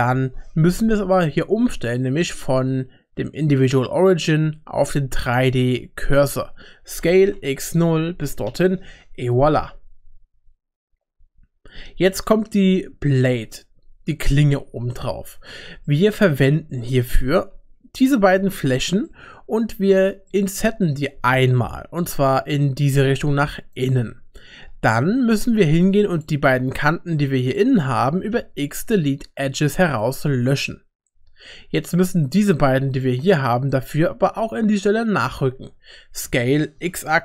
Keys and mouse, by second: 2.2-5.7 drag, 7.0 s, 9.0 Tab, 12.8 shift+middle click, 14.7 Tab, 15.5 3, 15.9 middle click, 16.8 shift+middle click, 18.7 shift+click, 19.0 middle click, 19.9 shift+middle click, 20.3 middle click, 22.0 i, 25.6 2, 26.1 click, 27.5 shift+click, 28.4 x, 30.1 typing, 32.9 shift+click, 36.2 s.